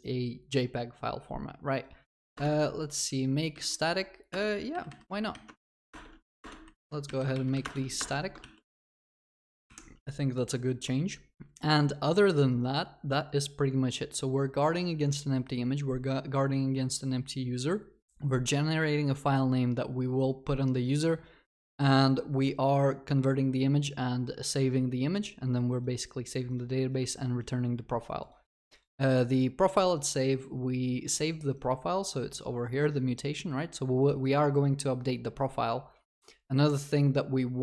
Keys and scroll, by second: 2.4 alt+Return.